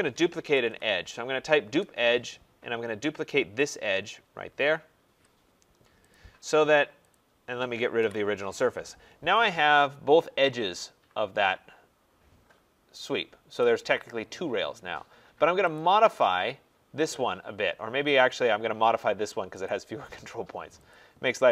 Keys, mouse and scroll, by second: 0.0-1.1 typing, 1.6 Return, 3.7 click, 5.0 Return, 6.1 click, 7.1 click, 8.0 Delete, 8.9 middle click, 8.9 middle click, 9.0 middle click, 13.1-13.6 scroll, 13.6 right click, 14.0 middle click, 14.1 middle click, 14.2 middle click, 15.8 click, 18.3 click, 19.6 click.